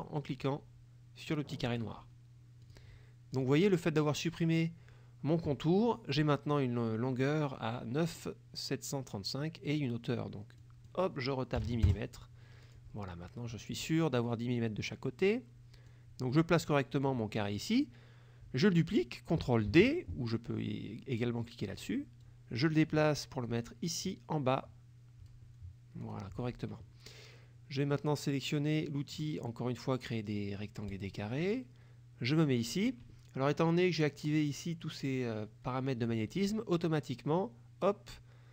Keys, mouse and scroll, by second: 1.8 click, 2.7 click, 3.4 click, 10.7 click, 11.7 KP_1, 11.9 KP_Enter, 12.8 click, 13.7-16.2 drag, 17.1 middle click, 19.8 ctrl+d, 22.3-25.5 drag, 26.1 click, 31.0 click.